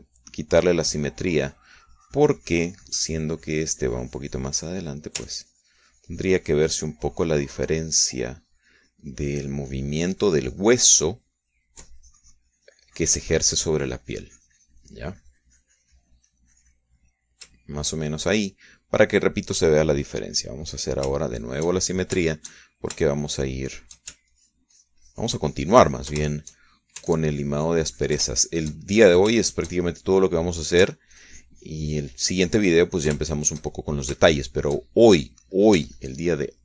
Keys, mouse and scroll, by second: 0.0 ctrl+z, 1.9 click, 2.8-6.3 drag, 6.7-18.8 ctrl+drag, 19.0 shift+click, 19.8-21.3 middle drag, 22.1 click, 22.6-25.6 shift+middle drag, 25.7-27.6 ctrl+shift+drag, 27.7 ctrl+shift+click, 28.5-30.2 ctrl+shift+drag, 30.3-32.2 ctrl+shift+drag, 32.6-35.6 ctrl+drag, 35.5 ctrl+shift+right click, 35.6-36.6 ctrl+shift+middle drag.